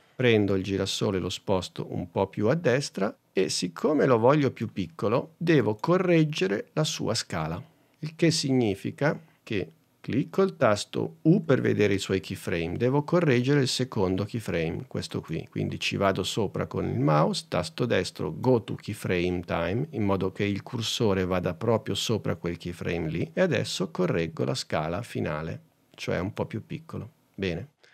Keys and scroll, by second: 11.5 u.